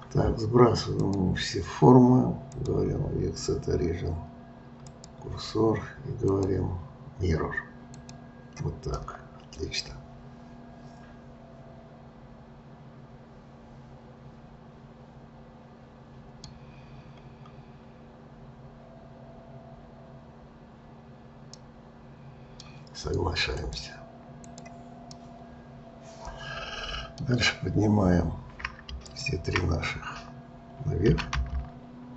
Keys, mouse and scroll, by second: 1.0-5.5 drag, 6.3-8.9 drag, 8.9-11.9 middle drag, 17.0-20.2 scroll down 1, 21.5-23.6 middle drag, 23.6-25.1 drag, 25.1 scroll up 1, 25.1-28.2 middle drag, 29.1 shift+click, 31.1 g.